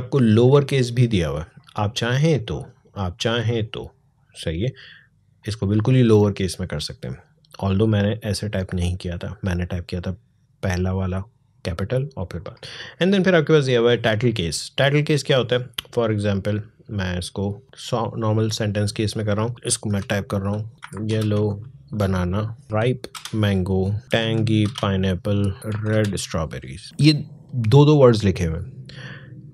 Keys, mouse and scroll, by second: 12.7 click, 19.7 shift+y, 20.7 typing, 22.4-26.0 typing, 26.8-29.4 drag.